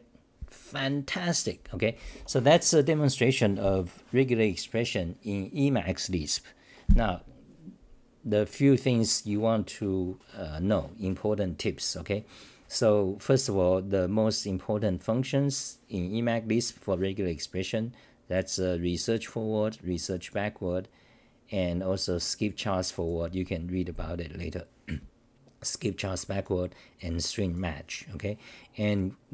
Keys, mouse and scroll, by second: 1.7-2.5 typing.